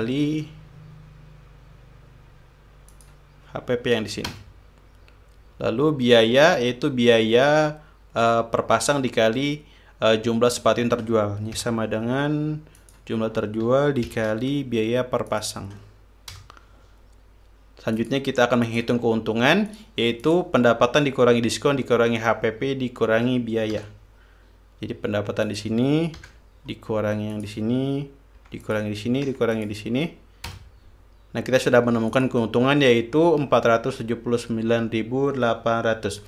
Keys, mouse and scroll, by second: 0.4 shift+8, 3.5 click, 5.0 Return, 12.2 =, 13.4 click, 14.7 shift+8, 15.9 click, 17.0 Return, 18.6 click, 19.2 click, 20.3 click, 20.8 click, 24.4 =, 26.1 click, 26.8 -, 28.0 click, 29.0 -, 29.2 click, 29.9 -, 30.2 click, 31.1 Return, 32.7 click.